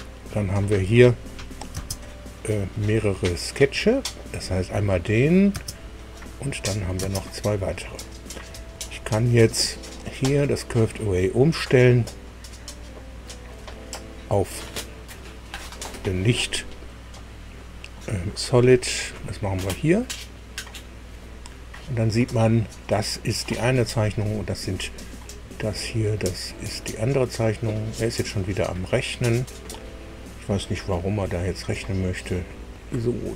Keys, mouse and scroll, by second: 1.2 click, 2.3 space, 2.8 click, 5.9 space, 6.1 click, 6.5 click, 6.9 space, 7.7 scroll down 2, 10.7 click, 14.2-15.6 drag, 18.9 click, 19.8 click, 21.1 click, 25.5-26.9 middle drag, 27.4 middle click, 31.9-33.3 middle drag.